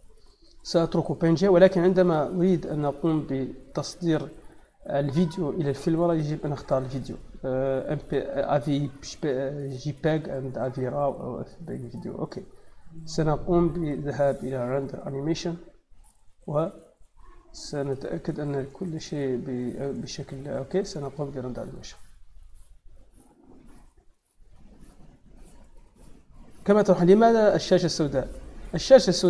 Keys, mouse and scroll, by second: 6.5 click, 11.7 click, 14.6 click, 20.7 click, 24.1 click, 25.6 click, 28.1 click.